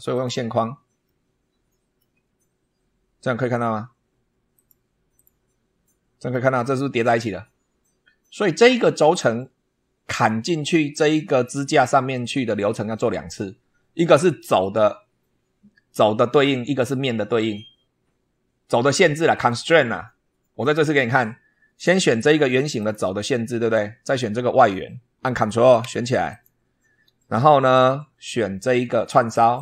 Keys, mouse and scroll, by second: 0.0 click, 1.0-2.1 middle drag, 2.3-2.8 scroll up 2, 4.4 click, 5.0 click, 5.7 middle click, 10.4 scroll down 1, 20.5-20.8 scroll down 1, 22.0-22.3 scroll up 1, 22.7 click, 23.5-24.4 scroll down 2, 26.2 ctrl+click, 29.4 click.